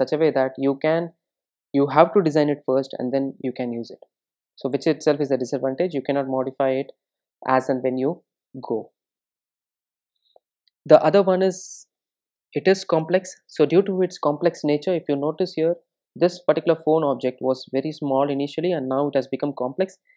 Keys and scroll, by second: 16.8 ctrl+shift+super+F12.